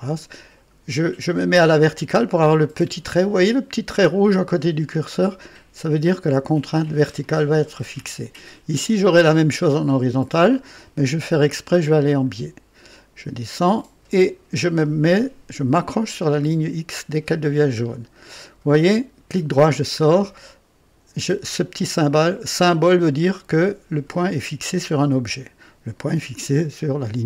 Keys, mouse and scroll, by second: 7.1 click, 12.0 click, 17.6 click, 18.8 right click, 19.9 scroll up 1, 27.1-27.2 scroll down 1.